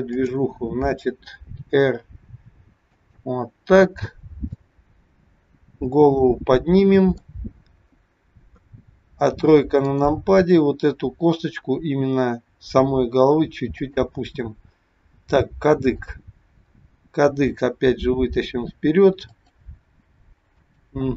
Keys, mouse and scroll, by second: 0.1 click, 1.7 r, 4.1-4.6 scroll down 2, 4.6 middle click, 8.5 KP_3, 9.8 click, 11.8 r, 14.7-15.9 scroll up 3, 15.9 click, 17.6 g, 20.4 click.